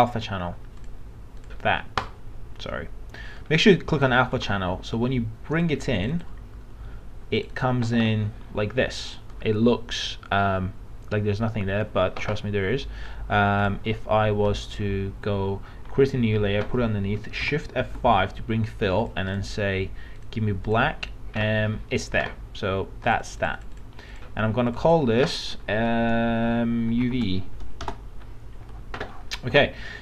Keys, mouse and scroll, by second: 4.4 alt+Tab, 5.5 click, 17.4 shift+F5, 19.0-25.9 drag, 26.9 shift+u, 27.8 shift+v, 27.8 shift+Return.